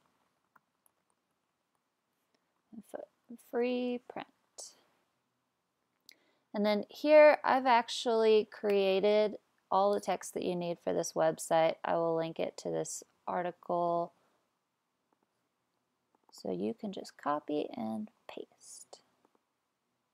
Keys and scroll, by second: 0.0-5.0 typing, 8.7 BackSpace, 18.2 super+c.